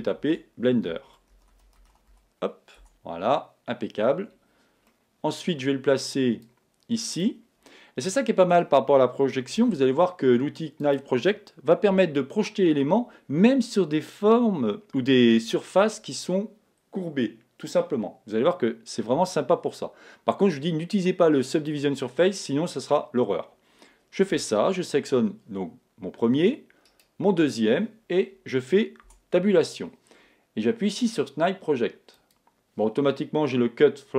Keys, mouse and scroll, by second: 0.0-2.1 typing, 2.8 Tab, 4.9-7.1 middle drag, 6.4 click, 9.5 s, 10.9 click, 11.9 KP_1, 28.5 right click, 29.0 Tab, 32.1 click.